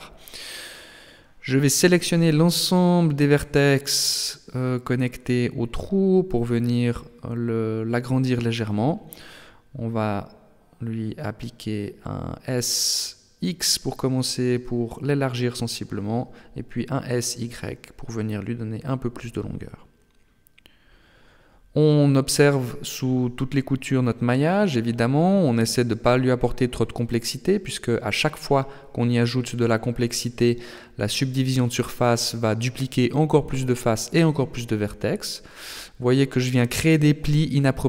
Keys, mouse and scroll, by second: 0.4 click, 1.4 alt+right click, 2.4 alt+shift+right click, 2.9 middle click, 4.5 alt+shift+right click, 5.0 alt+shift+right click, 5.5 middle click, 6.6 alt+shift+right click, 7.0 alt+shift+right click, 7.4 middle click, 8.6 alt+shift+right click, 9.1 alt+shift+right click, 9.5 middle click, 10.9 KP_1, 11.4 KP_3, 12.4 KP_7, 14.4 s, 17.2 s, 23.4 click, 26.1 b, 27.7 middle click, 29.8 KP_7, 31.3 s, 33.2 shift+middle click, 34.8 Tab, 35.8 Tab, 36.3 scroll up 2.